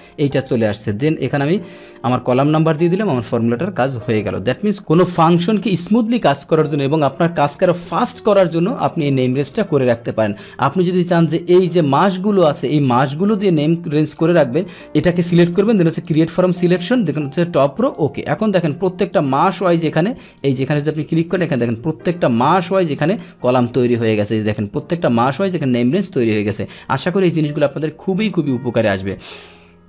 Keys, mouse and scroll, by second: 2.2 ctrl+Return, 4.6 click, 4.7-10.9 middle drag, 10.9-14.1 drag, 14.8 click, 15.9 click, 17.8 click, 19.1 click, 19.4 click, 20.3 click, 21.6 click, 22.9 click, 23.7 click, 24.4 click, 24.9 click, 25.8 click, 29.2 click.